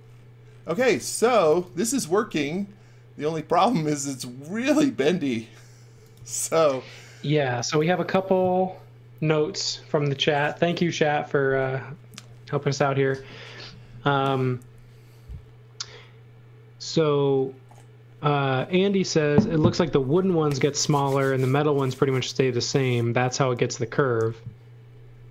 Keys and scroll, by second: 0.7-2.0 typing, 5.7-6.7 typing.